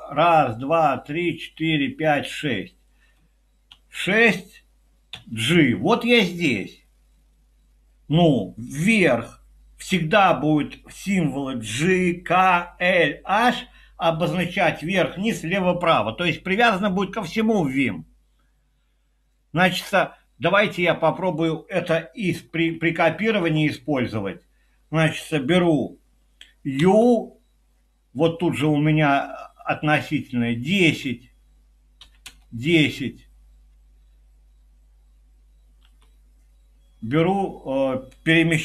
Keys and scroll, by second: 3.7 6, 4.9-5.6 typing, 22.4 Up, 22.5 Up, 22.7 Up, 23.0 Up, 23.1 Up, 23.4 Up, 26.8 y, 31.8-32.7 typing, 35.8 y.